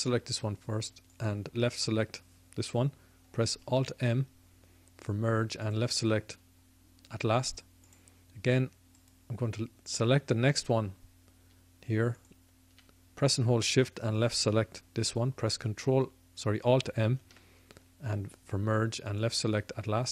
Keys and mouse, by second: 3.6 alt+m, 7.8-15.7 drag, 17.1 alt+m, 19.2 alt+m.